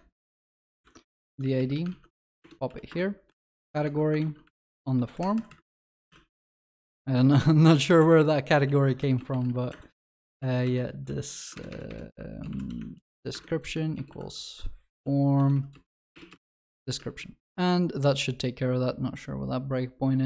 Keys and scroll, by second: 1.1 ctrl+x, 1.9 ctrl+v, 4.8 ctrl+w, 6.1 ctrl+y, 11.5 ctrl+BackSpace, 13.3 Return, 17.0 ctrl+alt+shift+l, 17.5 Escape.